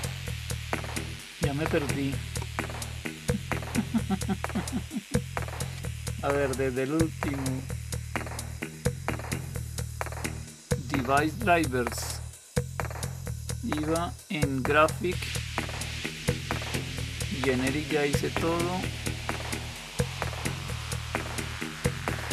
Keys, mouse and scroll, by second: 19.3 Down, 19.6 Down, 19.8 Down, 20.0 Down.